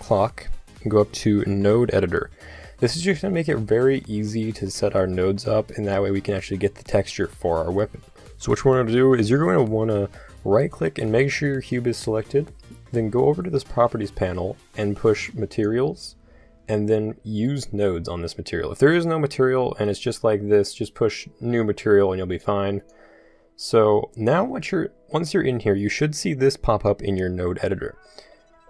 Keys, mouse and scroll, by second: 10.5-12.3 drag, 15.5-17.4 drag.